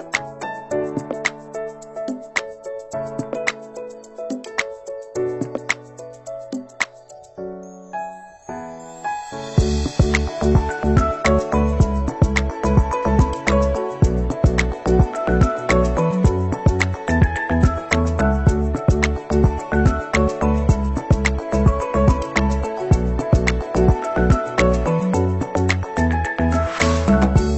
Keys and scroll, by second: 2.3 t, 2.5 o, 3.3 l, 5.2 space, 5.5 Right, 5.7 space, 5.9 Right, 6.0 space.